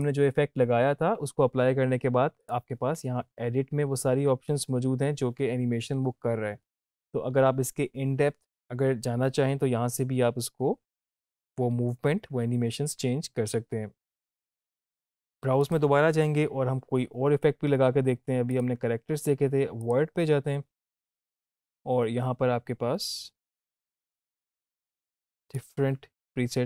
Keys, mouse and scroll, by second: 2.4 click, 6.2 scroll down 1, 11.5-13.4 scroll up 1, 14.5 click, 18.5 click.